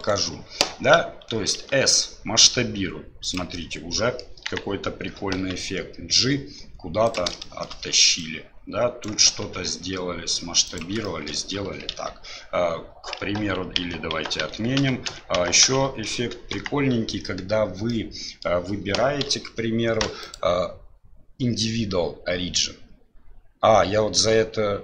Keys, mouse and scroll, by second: 0.0 right click, 1.6 s, 3.5 middle click, 4.5 KP_1, 5.4 g, 7.5 shift+middle click, 8.2 right click, 9.4 s, 11.1 shift+middle click, 11.9 KP_Divide, 13.8 ctrl+z, 14.2 ctrl+z, 14.5 ctrl+z, 14.8 ctrl+z, 15.1 ctrl+z, 15.4 ctrl+z, 15.7 ctrl+z, 16.5 KP_1, 17.9 middle click, 19.3 KP_Divide, 20.3 click.